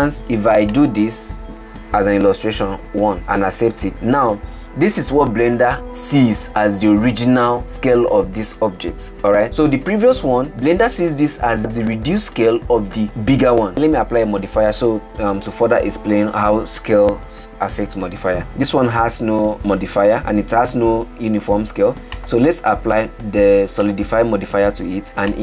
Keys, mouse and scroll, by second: 1.0-3.2 drag, 4.3-5.4 scroll down 9, 10.4 ctrl+z, 10.5-11.6 scroll up 5, 13.7-18.4 shift+middle drag, 24.1-25.1 drag.